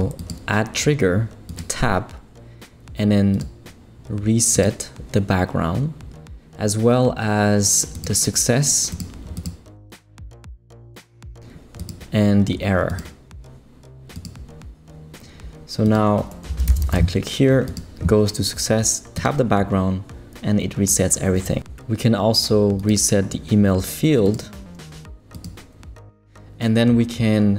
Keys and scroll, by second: 16.2-17.8 typing.